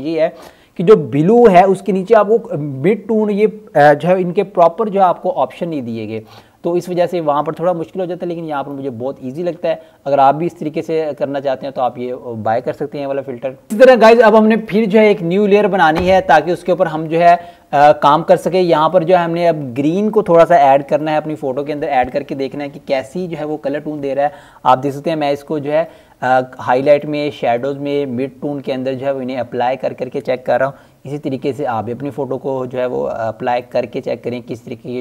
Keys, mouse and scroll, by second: 3.0-5.2 scroll down 1, 6.3 click, 11.4 click, 13.6-14.4 scroll down 1, 14.4 right click, 15.1 click, 18.2-18.9 scroll down 1, 19.7 click, 24.8 click, 30.2 click, 34.4 click.